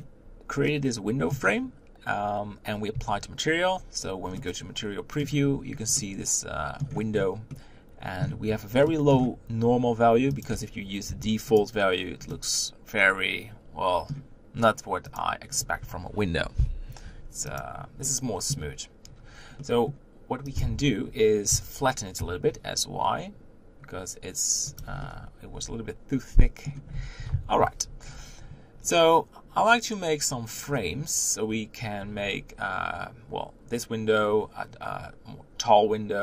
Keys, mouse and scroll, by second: 0.7-1.6 middle drag, 1.6-2.7 scroll up 2, 4.3-5.5 middle drag, 5.5-6.0 scroll up 2, 6.0-6.9 middle drag, 6.9 scroll up 1, 7.1-7.5 scroll down 1, 7.5-11.5 middle drag, 11.5-12.3 drag, 12.3-17.5 middle drag, 17.5-18.7 drag, 18.7-20.6 middle drag, 20.6 click, 24.0 s, 25.0-27.3 middle drag, 27.3 KP_1, 28.1-29.4 scroll down 3, 29.4 scroll down 1.